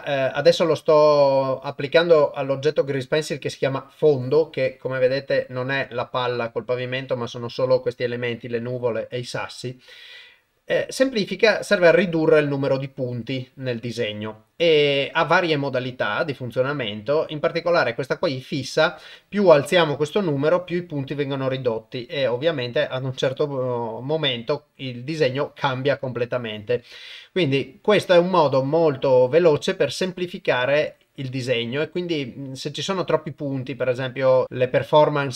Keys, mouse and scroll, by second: 15.6-16.4 drag, 20.0-24.6 shift+drag, 27.5-30.1 shift+drag, 31.0-34.4 shift+drag.